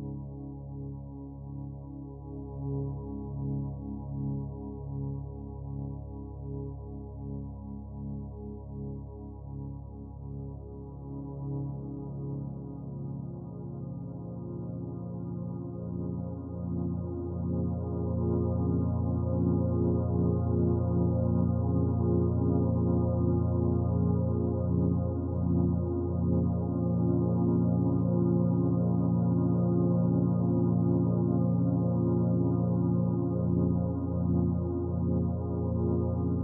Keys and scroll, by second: 4.8 ctrl+t.